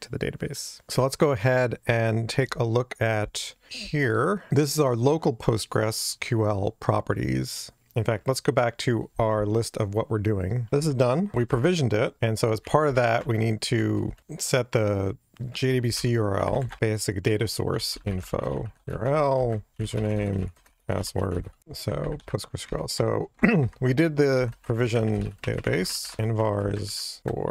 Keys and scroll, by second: 11.3 Delete, 13.2 Tab, 21.6 alt+shift+Left, 23.8 Delete, 25.1 Tab.